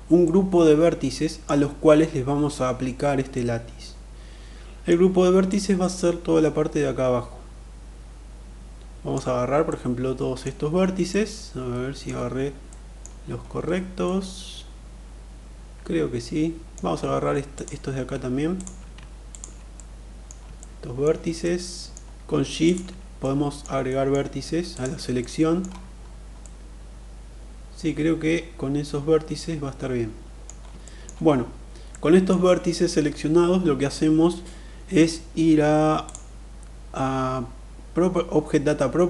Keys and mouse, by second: 2.9-4.4 middle drag, 5.1-8.7 drag, 9.2 middle click, 10.6-11.6 middle drag, 12.0 middle click, 13.6-16.3 middle drag, 17.0 shift+click, 18.0 shift+click, 18.7 shift+click, 19.3 middle click, 20.0 shift+middle click, 21.0 middle click, 22.1 shift+click, 22.6 middle click, 23.4 shift+middle click, 24.7 middle click, 26.0-30.0 middle drag, 30.4 shift+middle click, 31.5 middle click, 35.5 click.